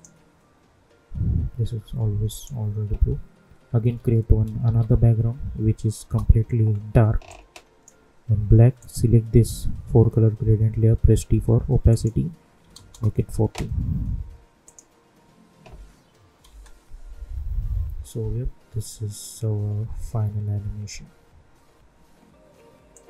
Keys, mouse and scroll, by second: 2.2 click, 4.6 ctrl+y, 6.0 Return, 7.2-8.7 drag, 10.8 t, 11.8 click, 12.8 Return, 14.6 click, 16.4 space, 21.7 space, 22.9 click.